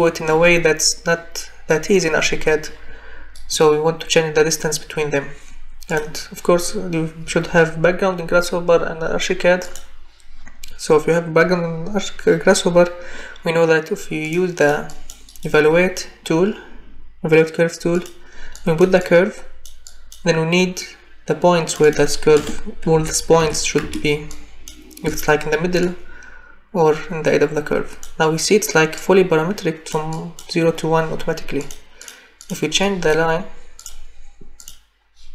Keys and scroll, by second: 22.4 0, 23.4 5, 23.8 Return.